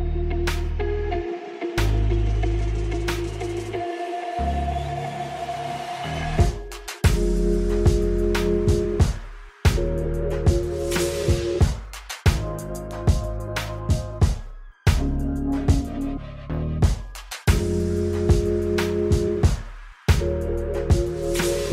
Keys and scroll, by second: 5.1 ctrl+d, 6.6 g, 7.5 Tab, 8.3 x, 11.1 Tab, 14.0 Escape, 14.7 y, 18.0 KP_1, 18.4 s, 19.9 alt+z.